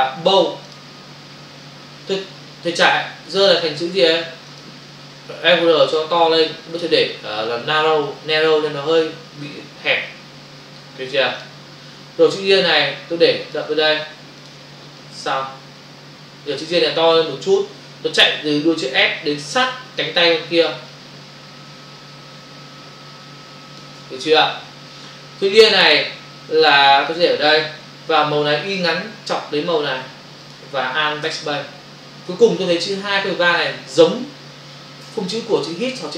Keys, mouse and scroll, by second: 2.6 click, 4.5 click, 5.9 click, 11.4 click, 12.8 click, 14.4 ctrl+click, 15.0 click, 20.9 shift+click, 24.3 Return, 26.7 click, 27.9 Up, 30.4 click, 31.2 alt+BackSpace, 32.2 v.